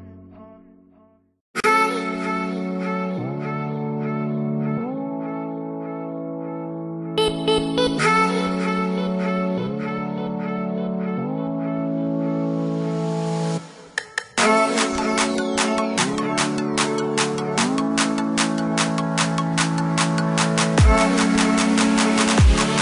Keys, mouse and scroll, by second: 0.3 click, 1.5 middle click, 1.9 click, 2.5-4.2 scroll down 1, 4.2 click, 5.6 click, 6.9 KP_3, 7.3 KP_Enter, 9.1 click, 9.6 click, 9.9 middle click, 11.4 click, 12.3 click, 13.7 space, 14.6 click, 15.6-16.3 scroll up 1, 16.3-16.7 scroll down 1, 16.7 scroll up 1, 17.1 click, 17.7-18.7 scroll down 1, 18.7 click, 20.4 click.